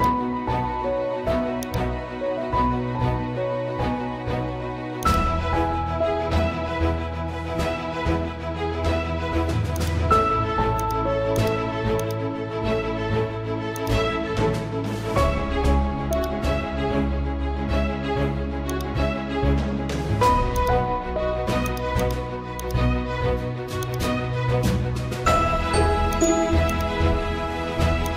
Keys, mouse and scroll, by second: 0.0-5.0 drag, 9.2 right click, 9.8-18.7 drag, 19.6 scroll down 1, 22.2 click, 26.1-28.1 drag.